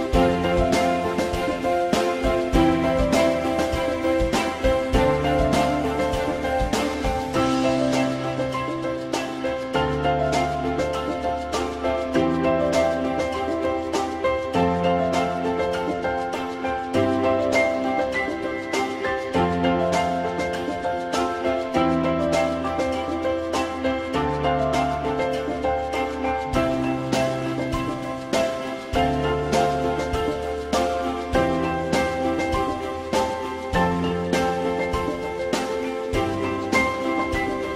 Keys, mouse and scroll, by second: 14.9 click, 20.6 click, 24.5 click, 26.1 click, 29.3-31.3 drag.